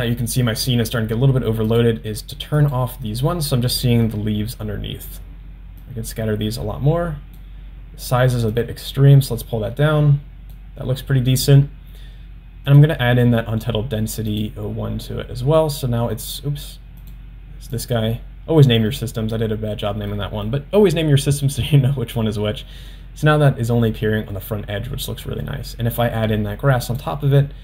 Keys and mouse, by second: 1.8 click, 2.7 click, 6.1-7.4 drag, 8.5-10.6 drag, 12.7-14.7 drag, 15.6-16.2 middle drag, 17.0-18.2 drag, 18.9-19.4 middle drag, 20.1-20.5 middle drag, 23.5-24.4 middle drag, 27.2 click.